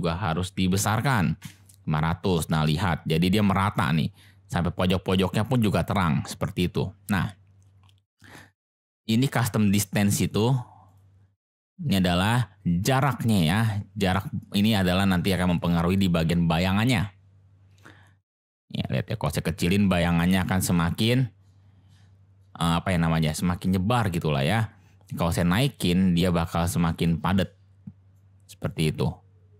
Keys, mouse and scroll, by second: 0.9 0, 8.5 click, 9.3 click, 10.1 click, 10.8 drag, 11.7-15.7 drag, 18.2 click, 20.4 click, 24.6 click, 26.7 click, 28.2 click.